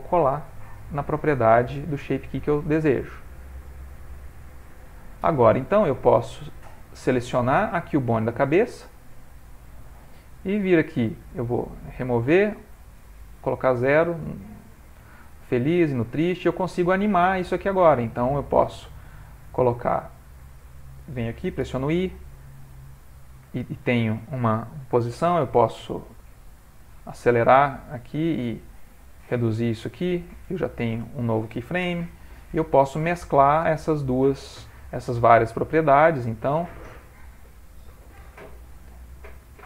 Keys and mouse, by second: 0.3 click, 1.6 middle click, 3.2 right click, 6.4 click, 7.7 r, 10.7 click, 12.6 click, 15.7 click, 18.8 click, 22.0 i, 25.7 click, 28.3 click, 32.2 i, 33.2 click, 35.4 click, 38.6 i.